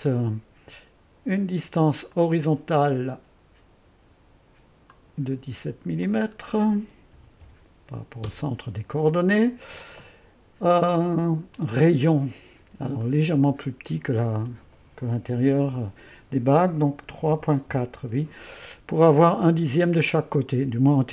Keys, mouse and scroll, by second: 0.2 click, 2.1-3.2 drag, 4.9-5.9 drag, 6.0-7.1 drag, 6.9-8.7 typing, 11.5 click, 13.0 click, 17.2 KP_3, 17.5 KP_Decimal, 17.7 4, 18.0 Return.